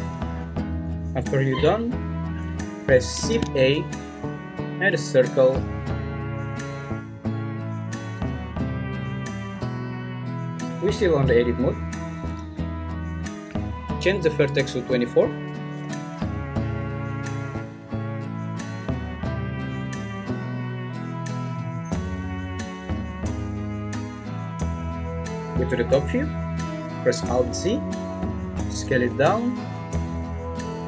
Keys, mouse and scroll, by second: 0.7 `, 2.0 `, 3.3 shift+a, 11.9 Escape, 11.9 z, 14.2 click, 23.8 `, 25.3 `, 27.5 alt+z, 28.7 s.